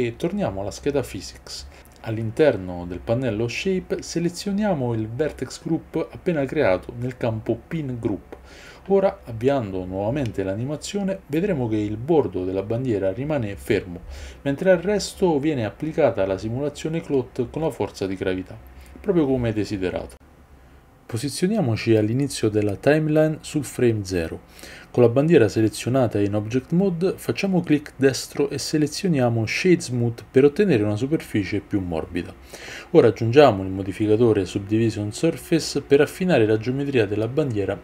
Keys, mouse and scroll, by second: 36.0 click.